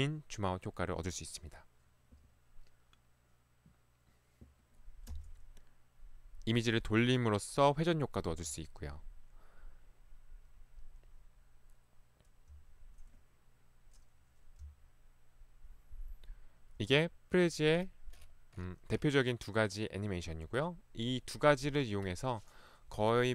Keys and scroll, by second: 5.2 Right, 8.4 Left, 12.6 Left, 14.7 Left, 17.0 Escape.